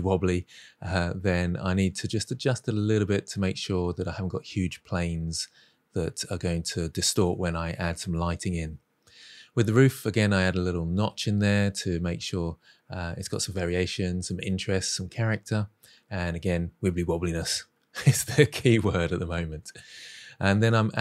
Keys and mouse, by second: 0.0-3.3 typing, 0.2 click, 0.3 click, 0.8 Tab, 0.9-1.2 middle drag, 1.3 Tab, 1.3 middle click, 1.4 click, 2.0 Tab, 2.3 alt+z, 2.8 click, 4.4 ctrl+z, 4.7 click, 5.0 s, 5.1 x, 6.8 click, 6.9 middle click, 7.1 Tab, 7.1 g, 7.3 middle drag, 7.7 ctrl+r, 8.4-8.9 middle drag, 9.0 ctrl+shift+v, 9.5 ctrl+shift+b, 9.9 shift+middle click, 10.0 shift+middle click, 10.3 3, 10.5 Delete, 10.7 middle drag, 10.9 middle drag, 11.3 middle click, 12.1-13.9 typing, 12.2 click, 12.3 click, 12.6 click, 13.0 click, 13.3 shift+middle click, 13.5 click, 13.7 click, 14.1 click, 14.2 Tab, 14.3 middle click, 14.5 middle click, 14.8 Tab, 14.9 click, 15.0 g, 15.2 click, 15.4 g, 15.5 click, 15.5 Tab, 15.7 middle drag, 16.1 shift+middle click, 16.4 z, 16.9 alt+z, 17.8-21.0 typing, 18.6 click, 20.4 click, 20.6 middle drag.